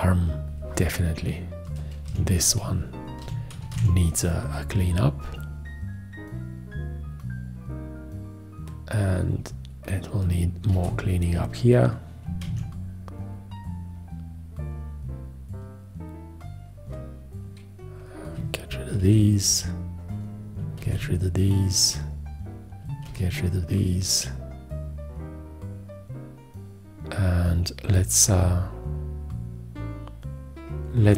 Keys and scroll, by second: 4.0 alt+q, 11.0 shift+x, 12.7 alt+q, 19.3 shift+x, 21.1 shift+x, 23.3 shift+x.